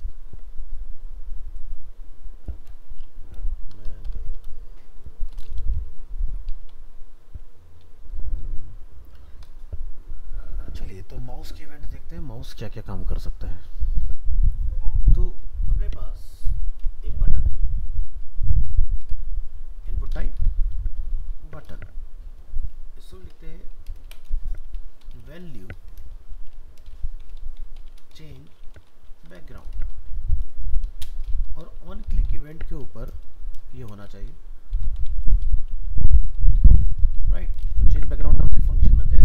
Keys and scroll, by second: 38.4 ctrl+s.